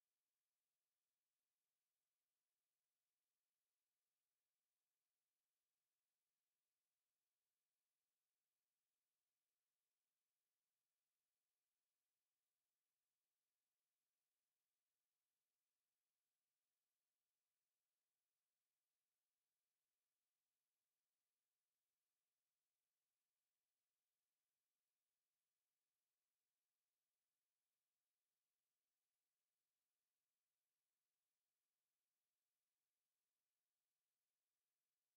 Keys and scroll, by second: 23.3 t, 24.6 Return.